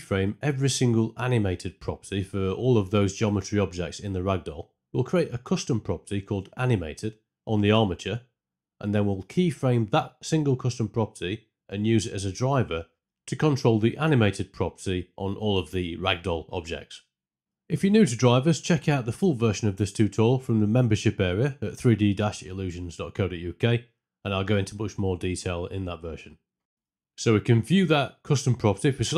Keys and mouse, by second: 5.3 middle click, 6.1 click, 7.1-9.6 drag, 10.3-11.8 right drag, 12.3 middle click, 12.9-13.6 drag, 15.1 click, 15.6-16.2 middle drag, 16.2-17.4 right drag, 19.0 ctrl+click, 22.5-23.9 right drag, 27.1 n.